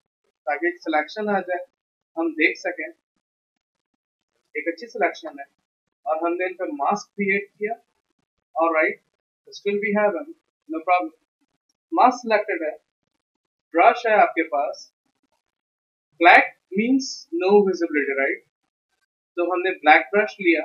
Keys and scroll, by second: 19.4 x.